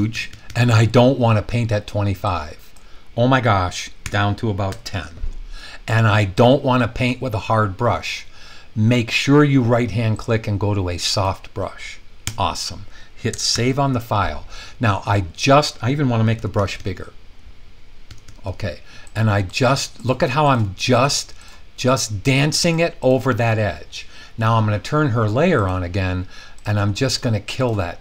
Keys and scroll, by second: 0.0-0.5 typing, 4.0-4.7 typing, 12.2 Return, 13.5 super+s, 16.3-16.7 typing, 18.1-18.5 typing.